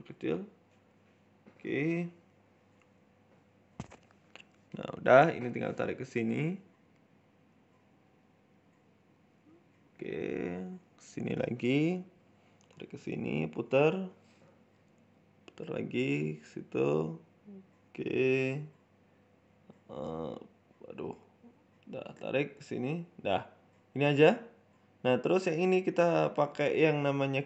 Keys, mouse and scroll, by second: 0.1 right click, 0.7 g, 1.7 right click, 1.9 shift+middle click, 2.5 g, 3.2 shift+middle click, 3.4 scroll down 1, 3.5 shift+middle click, 4.0 e, 5.9 shift+middle click, 6.4 r, 7.5 shift+middle click, 7.9 e, 9.2 scroll up 2, 9.3 shift+middle click, 9.8 r, 11.3 shift+middle click, 11.7 e, 12.7 r, 13.8 g, 14.9 s, 15.6 g, 17.1-21.9 typing, 20.6 ctrl+z, 22.9-23.2 scroll down 4, 23.0 Tab, 23.3 shift+middle click, 23.5 scroll down 1, 23.6 middle click, 23.9-24.4 scroll up 1, 24.4 right click, 24.4-24.7 scroll up 1, 24.7 right click, 25.6 click, 27.1-27.4 scroll down 12.